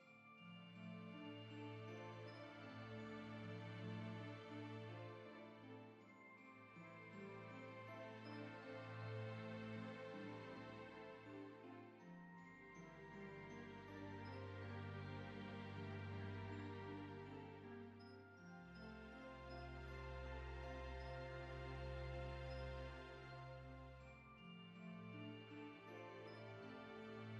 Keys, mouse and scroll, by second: 0.4 click, 1.3-1.8 scroll down 7, 1.5 middle click, 1.8-2.3 middle drag, 2.3-2.6 scroll down 1, 2.6 middle click, 3.0 scroll up 8, 3.2 scroll down 2, 3.4-3.8 shift+middle drag, 3.8-4.3 scroll down 3, 4.3 scroll up 2, 4.5-5.1 middle drag, 5.2-6.0 middle drag, 8.1 click, 8.7-9.6 drag, 9.6 KP_Decimal, 10.2 KP_Divide, 10.6 KP_5, 10.8 Tab, 10.8-11.9 middle drag, 11.9 scroll up 3, 12.2 3, 12.6 shift+click, 12.7 shift+click, 12.8 shift+click, 13.1 shift+click, 13.3 scroll up 2, 13.4 shift+middle click, 13.6 shift+click, 13.6 shift+click, 13.8 shift+click, 13.9 shift+click, 14.4 shift+click, 14.9 shift+click, 15.1 scroll up 3, 15.2 shift+middle click, 15.4 shift+click, 15.8 shift+click, 16.0-16.6 scroll down 3, 16.1 middle click, 16.6 g, 18.2 scroll down 3, 18.3 middle click, 18.7 Tab, 19.0-19.7 middle drag, 19.9 click, 20.2-20.9 middle drag, 22.4 click, 23.0-23.8 drag, 24.0 scroll up 2, 24.1-24.7 middle drag, 24.7 scroll up 1, 24.8 middle click, 25.0 scroll down 4, 25.1 middle click, 26.1 scroll up 1, 26.2-27.2 middle drag.